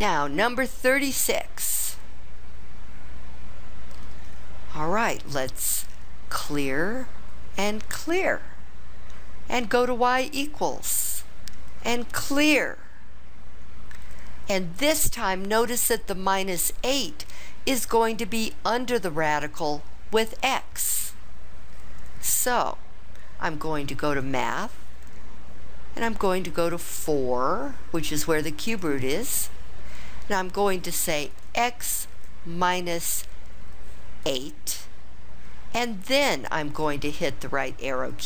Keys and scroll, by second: 28.7 4, 31.3 x, 32.6 -, 34.2 8, 36.8 ).